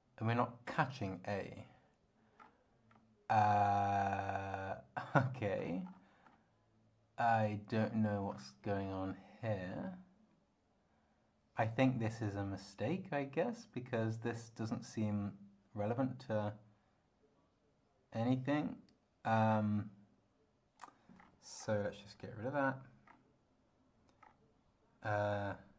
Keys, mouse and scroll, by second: 2.4 scroll down 2, 2.9 scroll down 1, 5.6-6.5 scroll up 6, 7.8 scroll down 2, 8.3-9.0 scroll up 4, 12.2-21.0 drag, 21.2-22.3 scroll down 6, 22.7-23.3 scroll down 4, 24.2 scroll down 2.